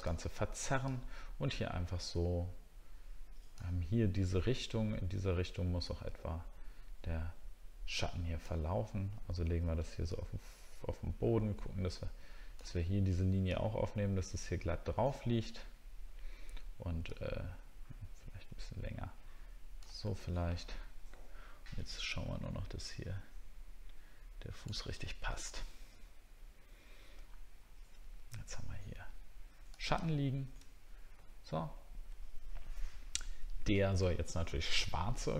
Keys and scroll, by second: 20.0-20.5 alt+scroll up 2, 21.1-21.6 alt+scroll up 2, 25.0 alt+scroll down 1, 25.5 alt+scroll down 1, 27.2 alt+scroll down 1, 30.1 alt+scroll down 1.